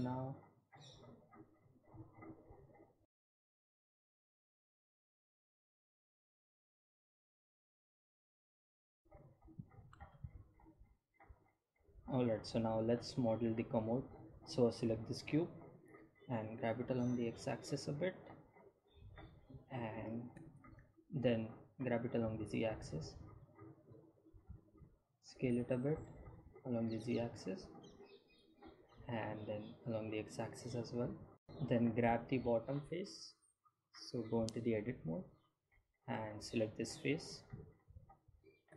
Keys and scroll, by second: 18.2 g, 18.3 x, 22.6 g, 22.8 z, 25.5 s, 25.8 z, 31.1 s, 36.2 Tab.